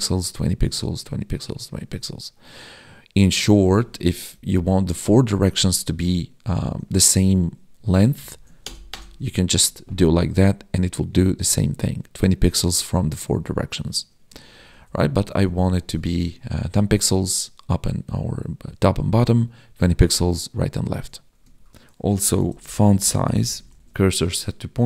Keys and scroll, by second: 4.3 Left, 8.2 ctrl+shift+Left, 9.2 ctrl+s, 14.5 ctrl+z, 15.8 ctrl+s, 23.8 ctrl+s.